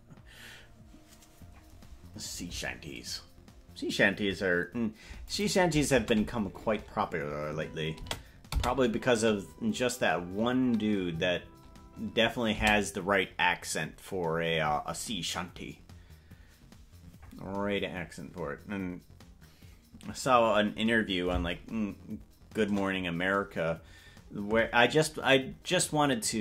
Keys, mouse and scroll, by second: 5.4 click, 6.0 space, 8.2 space, 8.6 space, 12.8 space, 21.2-24.3 typing.